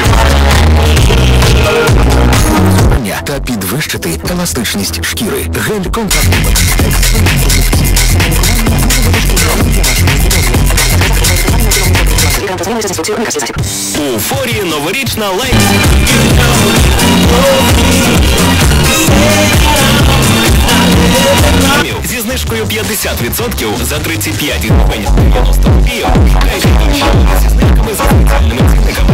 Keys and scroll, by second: 2.9 Page_Down, 12.4 Page_Down, 21.9 Page_Down.